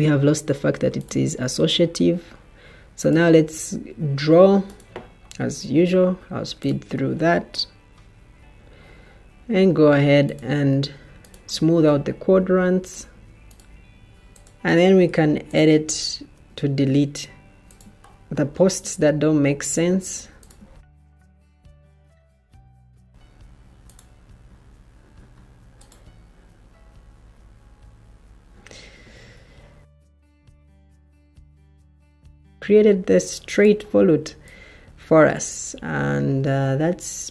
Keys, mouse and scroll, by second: 11.2 Escape, 20.4 Delete, 21.1 Delete, 22.8 Delete, 28.8 Escape, 30.4 o.